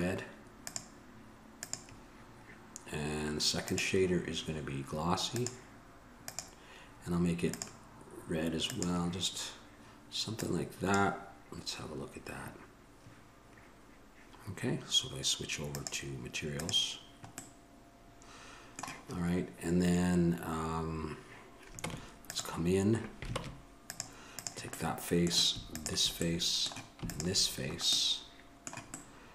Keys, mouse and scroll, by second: 17.8-22.0 middle drag, 22.0 Tab, 23.6 ctrl+Tab, 24.6 click, 26.5-29.2 middle drag.